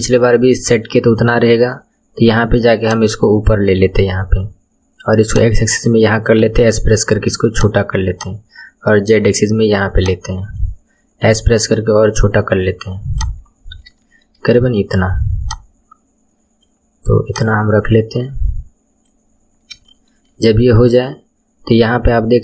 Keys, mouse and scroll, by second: 1.0-1.7 scroll down 9, 2.8 click, 3.7-5.2 scroll up 11, 5.2 click, 6.4 s, 8.1 click, 10.0 click, 11.2 s, 13.4-14.0 scroll up 6, 14.0 shift+middle click, 14.4-15.4 scroll down 2, 15.4 click, 17.2 click, 19.2-19.9 scroll up 6, 19.9 shift+middle click, 20.3-20.8 scroll up 1, 20.8-21.6 scroll up 3.